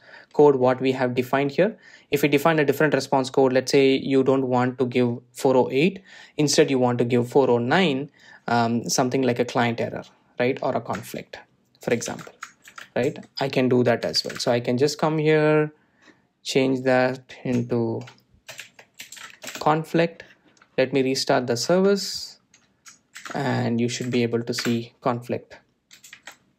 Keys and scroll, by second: 10.9 super+b, 15.9 super+e, 21.2 Return, 23.1 super+r.